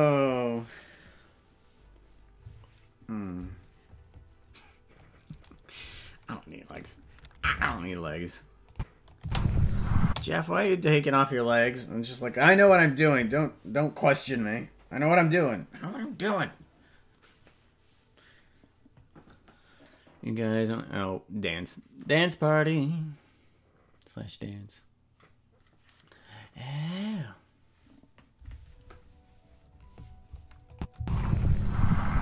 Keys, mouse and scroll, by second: 6.0-6.9 scroll down 4, 6.9 right click, 6.9 scroll down 1, 7.6 ctrl+Tab, 8.7 click, 9.2 space, 10.0 space, 30.7 click, 30.9 space.